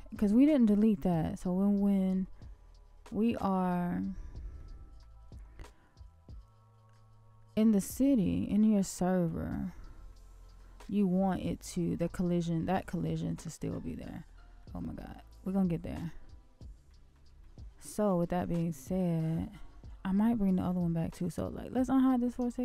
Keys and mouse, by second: 1.6-1.9 middle drag, 2.2-3.5 shift+middle drag, 6.9-7.7 middle drag, 8.0 shift+middle click, 9.1-9.4 middle drag, 10.0 shift+middle click, 11.0 shift+middle click, 12.6 shift+middle click, 13.8-14.6 middle drag, 14.9-15.4 shift+middle drag, 16.8 middle drag, 17.4 shift+middle click, 18.3-18.6 shift+middle drag, 19.1-19.5 shift+middle drag, 20.0-20.6 middle drag, 22.3 shift+click.